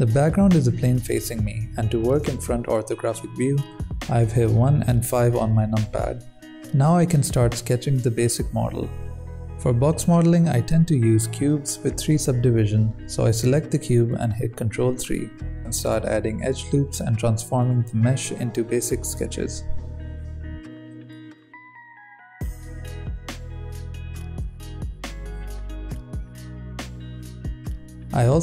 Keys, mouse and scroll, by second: 0.1 s, 1.0 KP_3, 1.5 r, 2.3 g, 3.6 KP_1, 4.2 scroll down 5, 4.4-4.7 scroll up 4, 4.7 s, 5.3 click, 5.8 scroll up 1, 10.6 ctrl+3, 11.4-12.7 drag, 12.7 shift+middle click, 13.5 g, 14.1 s, 15.9-16.5 drag, 16.5 shift+d, 17.2 Tab, 17.4 alt+a, 17.5 c, 18.2 g, 18.8 alt+a, 19.2 s, 19.6 g, 20.5 alt+a, 21.0 c, 21.4 ctrl+r, 23.5 s, 24.5 Tab, 24.8-25.3 drag, 25.3-28.1 right drag, 25.3 n, 25.4 click, 26.0 s, 26.2 g, 26.7 click, 27.2-28.4 typing, 28.1 drag.